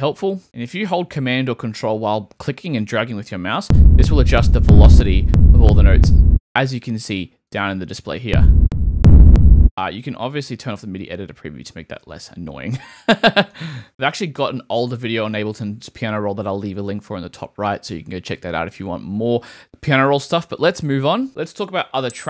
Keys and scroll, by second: 0.4 super+z.